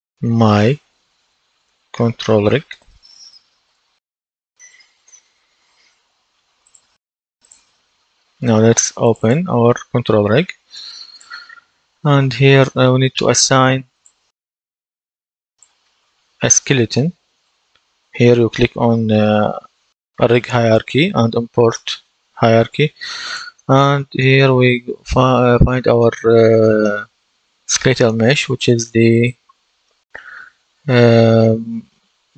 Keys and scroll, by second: 0.0-4.7 typing, 5.0 Return.